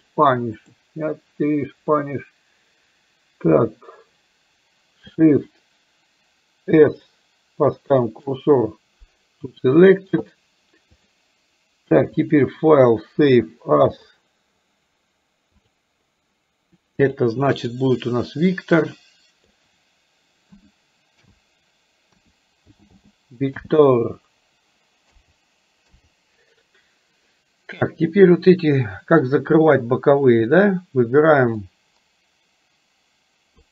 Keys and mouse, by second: 6.8 shift+s, 11.0 click, 12.3-14.3 drag, 31.8-33.7 drag.